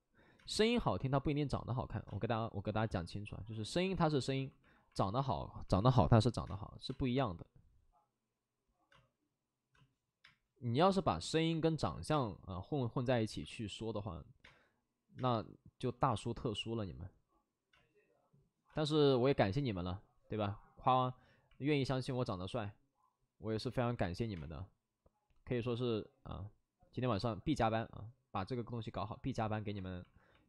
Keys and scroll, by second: 0.3 space, 2.0 space, 6.2 space, 6.8 space, 8.8 space, 9.7 space, 10.2 space, 13.4 ctrl+z, 13.4 space, 14.4 space, 16.1 space, 17.6 space, 20.8 alt+s, 21.9 space, 23.4 alt+s, 23.8 ctrl+z, 24.3 space.